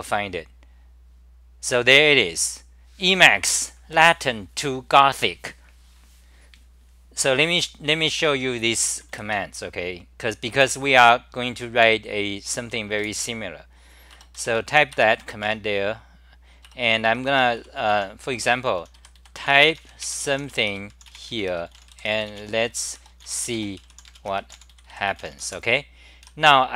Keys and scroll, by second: 13.0 super+w, 14.1 Return, 14.1-15.1 typing, 15.7 Home, 16.7 Return, 17.6 c, 17.9 u, 25.5 Home.